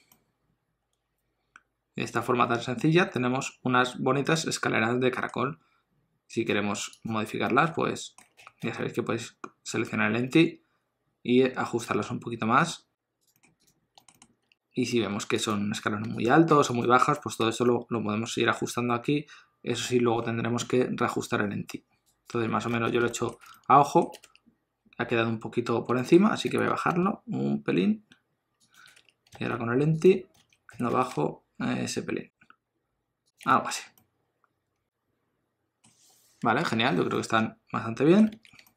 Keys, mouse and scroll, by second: 0.2 middle click, 6.3 click, 7.4 middle click, 8.4 r, 13.3 middle click, 13.6 click, 14.0 shift+middle click, 14.1 middle click, 14.2-14.8 scroll up 2, 14.5 Tab, 15.0 3, 15.5 click, 16.1 shift+click, 17.1 middle click, 17.4 g, 22.3 Tab, 22.8 alt+a, 23.1 shift+middle click, 23.5 ctrl+middle click, 24.2 Tab, 26.0 shift+middle click, 26.5 g, 29.0 Tab, 29.3 alt+z, 29.9 click, 30.4 alt+z, 30.7 g, 33.5 alt+a, 33.7 scroll down 1, 34.0 middle click, 36.6 KP_Divide, 37.1 middle click, 38.3 alt+a, 38.6 shift+middle click.